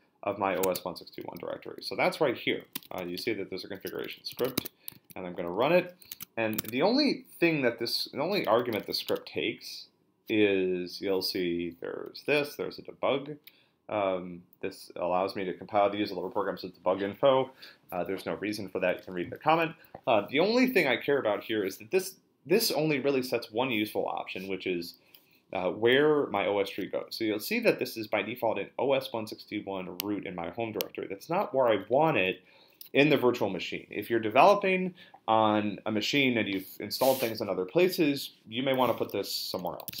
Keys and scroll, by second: 0.6 super+Tab, 1.8-5.0 typing, 6.1 super+Tab, 6.6 super+Tab, 8.2-9.4 typing, 39.3-40.0 typing.